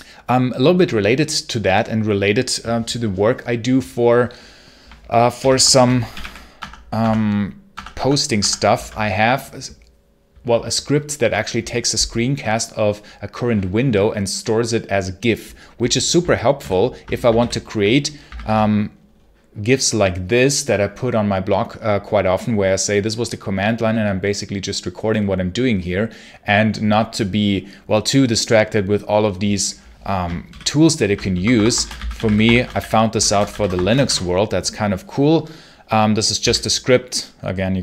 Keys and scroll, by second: 5.3 ctrl+l, 5.3-6.6 typing, 6.9 Tab, 7.6 Tab, 7.8 Tab, 8.3 Tab, 8.6 space, 16.5 ctrl+super+h, 17.2 super+h, 18.2 ctrl+Page_Up, 30.4 ctrl+super+l, 31.2 Escape, 31.4-34.2 typing, 36.3 d.